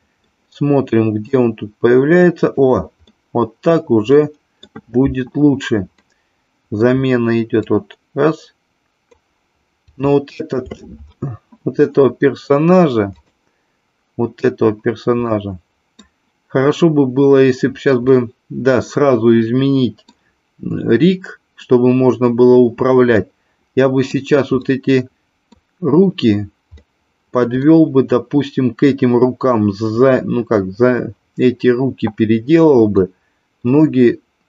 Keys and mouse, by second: 1.3 click, 3.0-4.7 middle drag, 5.9-6.8 middle drag, 7.7 click, 9.9-10.7 shift+middle drag, 13.1 click, 15.3-16.1 middle drag, 18.1-20.1 middle drag, 23.2-24.2 middle drag, 24.6-25.6 middle drag, 26.7-27.7 middle drag, 32.9-33.7 middle drag.